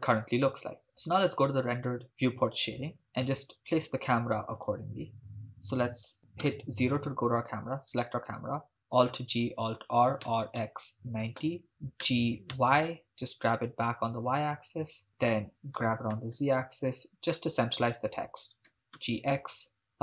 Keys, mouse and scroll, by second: 3.0-4.7 scroll down 2, 4.7 click, 6.5 KP_0, 7.9 right click, 8.9 alt+g, 9.5 alt+r, 10.2-12.5 typing, 11.4 Return, 15.1 click, 15.8 g, 16.1 z, 17.9 shift+click, 18.7 g, 19.0 x.